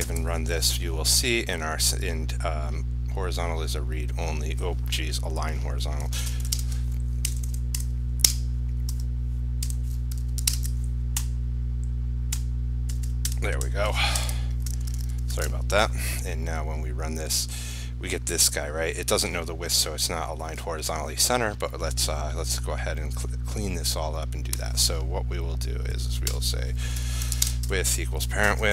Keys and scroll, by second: 0.3 ctrl+r, 6.7 ctrl+space, 10.7 ctrl+space, 14.9 ctrl+s, 15.1 ctrl+shift+q, 15.6 ctrl+r, 27.6 ctrl+space.